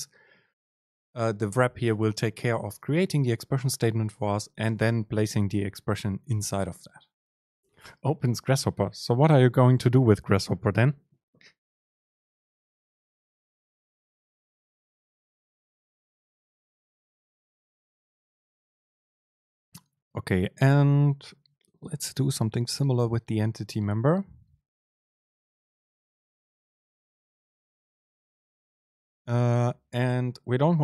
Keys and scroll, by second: 28.0 shift+Left, 30.2 BackSpace.